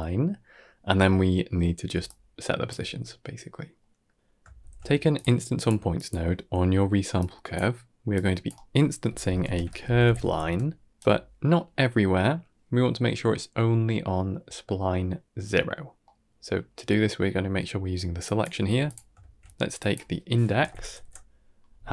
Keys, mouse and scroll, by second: 1.8 d, 1.9 click, 2.6 d, 2.6 d, 3.7 middle click, 4.2 middle click, 4.6 shift+a, 7.1 click, 8.1-11.1 drag, 10.9 right click, 15.9 middle click, 16.4 click, 16.9 g, 18.1 click, 18.5 g, 19.1 shift+a.